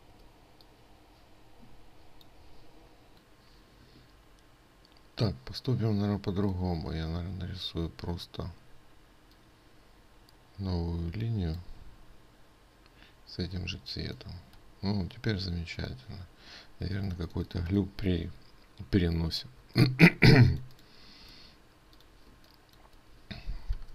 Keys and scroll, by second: 14.0 ctrl+space, 17.3 ctrl+space.